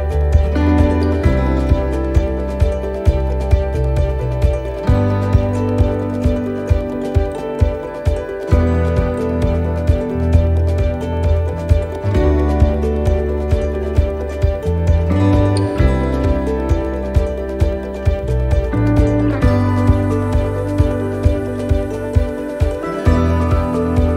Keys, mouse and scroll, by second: 1.7 l, 1.9-2.5 l, 2.8 l, 3.0-7.1 l, 7.1 middle click, 7.7-8.3 scroll down 1, 8.3 scroll down 1, 8.8 shift+d, 10.3 click, 14.0 middle click, 16.1 click, 18.1 middle click, 19.6 right click, 21.7 ctrl+z, 22.1 middle click, 23.1 click.